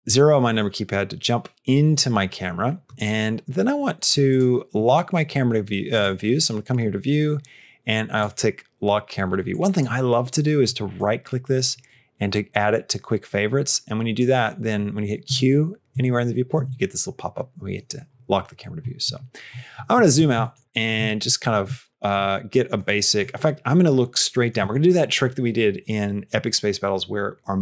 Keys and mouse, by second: 4.1 click, 8.0 click, 9.3 click, 10.8-14.0 right drag, 15.1 q, 15.8 q, 16.4 q, 20.3 shift+middle click, 20.9 shift+middle click, 21.7 shift+middle click, 22.3 middle click, 22.6 middle click, 23.1-24.5 middle drag.